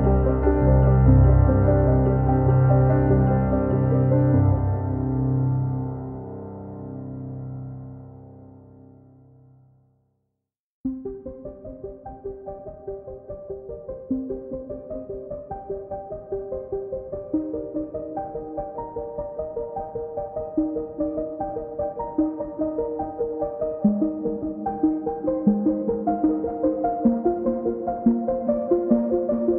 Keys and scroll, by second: 1.0 ctrl+z, 2.1 Delete, 6.7 Return, 7.7 Escape, 11.2 Return, 12.1 Escape, 26.3 c, 27.5 1, 27.8 Return, 28.9 f.